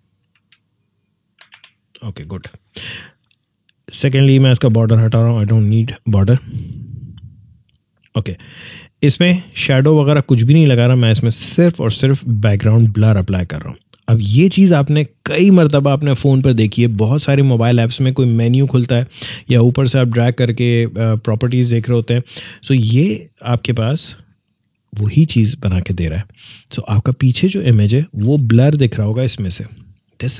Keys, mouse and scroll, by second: 1.3 typing, 2.3 Return, 4.8-11.0 drag, 24.5 click, 26.9 scroll up 1, 27.2 scroll down 1, 30.2 click.